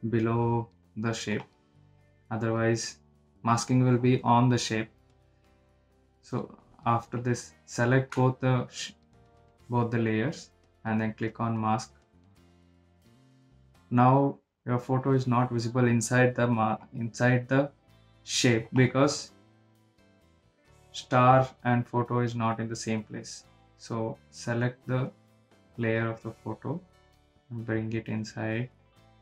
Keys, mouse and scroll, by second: 0.1 click, 3.8 click, 7.2 click, 9.9 ctrl+shift+click, 13.0 ctrl+shift+click, 15.9 click, 21.2 click, 26.5 click, 27.9-29.2 drag.